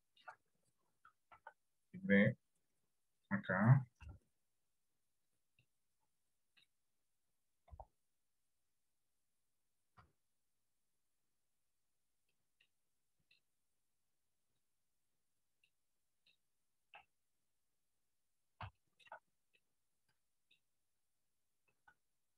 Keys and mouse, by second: 0.1 shift+middle click, 1.4 shift+d, 4.1 r, 5.8-6.8 middle drag, 7.8 KP_1, 10.1 g, 12.8 middle click, 14.7 click, 15.8 middle click, 17.2 KP_1, 18.9 shift+middle click, 19.7 middle click, 21.8 r.